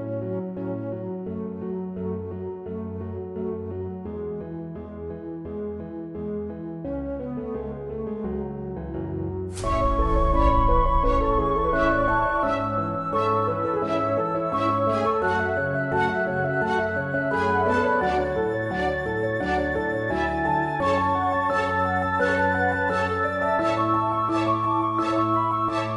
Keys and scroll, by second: 12.0 shift+F1, 12.9 shift+F1, 13.7 shift+F1, 13.7-21.1 typing, 17.6 shift+F1, 19.4 shift+F1.